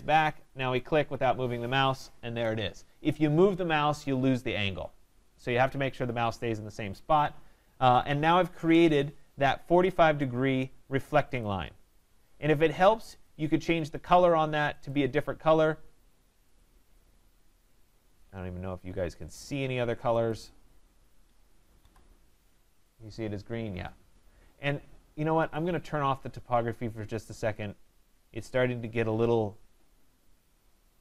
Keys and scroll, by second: 8.5 Return, 21.8 Escape.